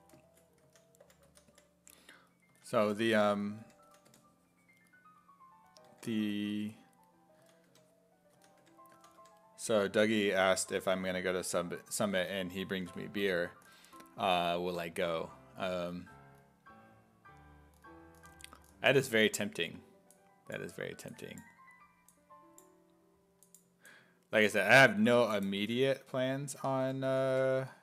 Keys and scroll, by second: 0.4-4.6 typing, 5.9 1, 7.4-10.2 typing, 26.3-27.8 typing.